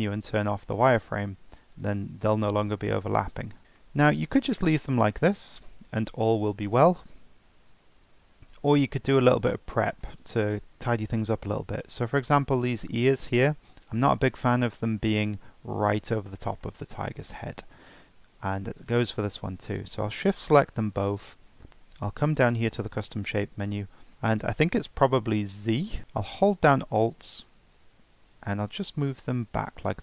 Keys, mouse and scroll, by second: 2.0 scroll down 4, 2.5 click, 3.1-3.6 shift+middle drag, 3.6 click, 3.8-4.1 shift+middle drag, 4.1 scroll up 2, 4.9 click, 5.3 g, 6.8 click, 7.1 g, 8.3-11.7 shift+middle drag, 11.7 click, 12.6-14.2 scroll down 1, 14.2-16.7 middle drag, 17.6-18.9 shift+middle drag, 18.9 shift+click, 21.5-22.3 scroll down 7, 24.1 ctrl+z, 27.7-30.0 alt+drag.